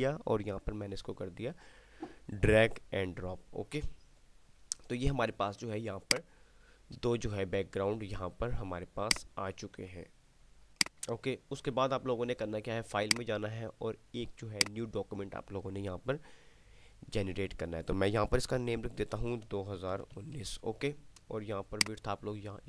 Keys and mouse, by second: 6.1 click, 8.6 typing, 9.3 click, 17.1 typing, 19.6 click, 22.1-22.6 click.